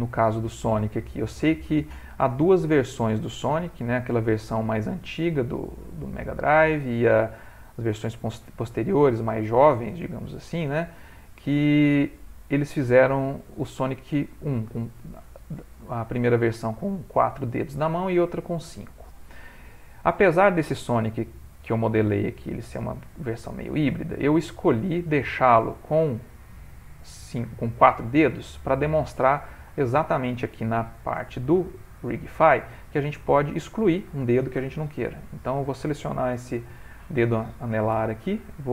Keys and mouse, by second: 0.1 shift+middle click, 0.7 g, 3.8 click, 4.7 ctrl+middle click, 5.6 click, 6.0 g, 7.4 click, 8.0 g, 10.2 click, 12.4 click, 13.9 click, 14.8 shift+middle click, 14.9 shift+middle click, 15.4 g, 17.3 click, 17.7 g, 18.8 ctrl+middle click, 20.3 shift+middle click, 20.4 shift+middle click, 21.4 click, 22.3 shift+middle click, 22.9 ctrl+middle click, 23.0 ctrl+middle click, 23.5 s, 24.8 g, 26.7 middle click, 27.7 middle click, 28.7 middle click, 29.1 typing, 29.8 click, 31.0 g, 32.6 ctrl+middle click, 33.5 click, 35.2 l, 36.8 l, 37.9 z.